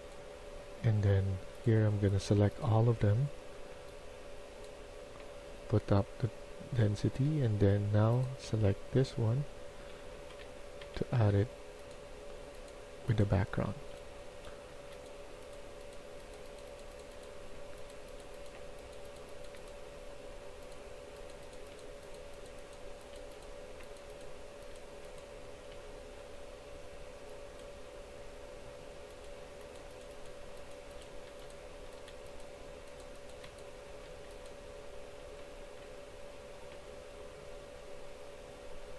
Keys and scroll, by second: 9.6-11.6 typing, 12.8-13.6 typing, 17.1-17.9 typing, 19.4-21.6 a, 21.6 s, 23.1 s, 24.3 e, 25.6 s, 29.4 shift+s, 30.6-32.1 typing, 33.4-35.7 typing.